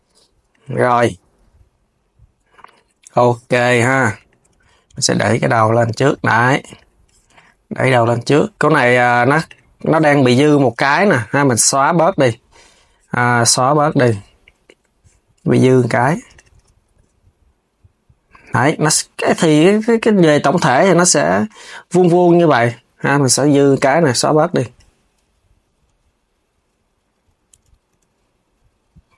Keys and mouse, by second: 0.2 click, 0.4 KP_3, 0.7 g, 3.9 click, 4.2 KP_3, 4.6 g, 7.6 click, 9.1 click, 11.1 x, 16.0 click, 16.2 KP_3, 16.6 g, 19.8 click, 20.5 KP_3, 22.5 x, 23.9 KP_3, 25.3 click, 26.9 KP_3, 27.6 g.